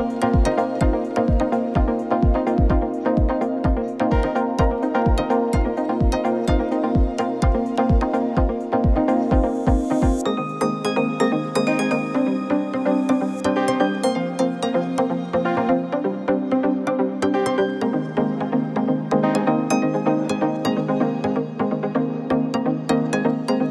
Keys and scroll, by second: 0.9 ctrl+=, 1.4 space, 3.6 shift+Up, 3.8 shift+Down, 4.4 Down, 5.5 Up, 5.9 Right, 6.2 Left, 6.9 ctrl+z, 7.8 Down, 8.0 Up, 16.2 ctrl+z.